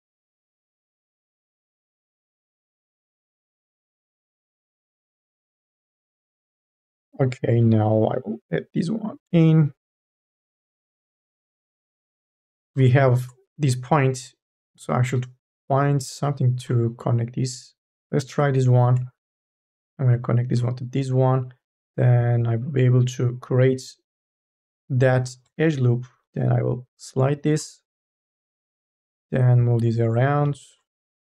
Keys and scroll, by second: 0.1 1, 2.1 ctrl+z, 6.7 1, 7.3 m, 7.8 e, 25.5 1, 25.9 m, 26.4 o.